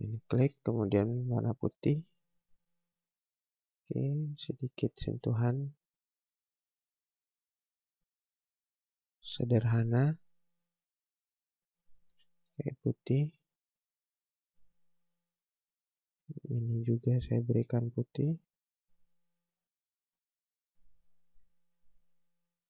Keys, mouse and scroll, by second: 0.3 space, 1.5 click, 2.3 right click, 2.7 scroll down 1, 3.1 click, 3.8 scroll up 1, 4.5 scroll down 1, 4.8 scroll up 1, 5.0 space, 9.1 click, 12.0 space, 12.9 click, 13.6 right click, 14.1 scroll down 1, 15.3 scroll up 1, 16.0 space, 17.1 click, 22.4 click.